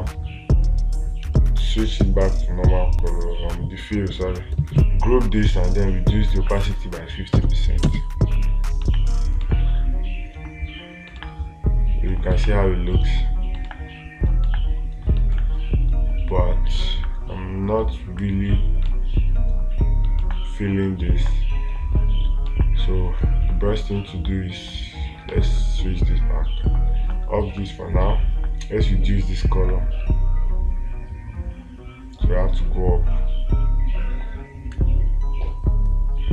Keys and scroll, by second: 9.9 space, 11.6 space, 14.1 space, 15.8 space, 19.3 space, 20.7 space, 25.8 ctrl+z.